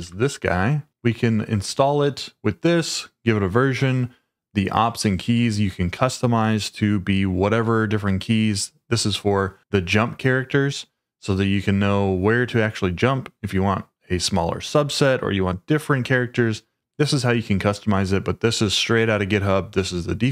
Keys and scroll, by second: 0.0-0.4 typing.